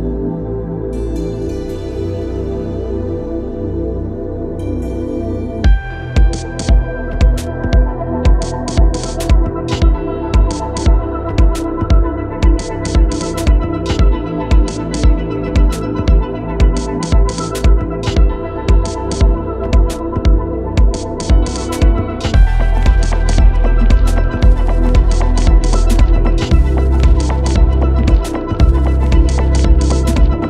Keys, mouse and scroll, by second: 1.8 click, 6.3 f, 10.3 Return, 11.8 click, 15.9 3, 21.0 7, 21.7 Return, 24.2 click, 30.0 e.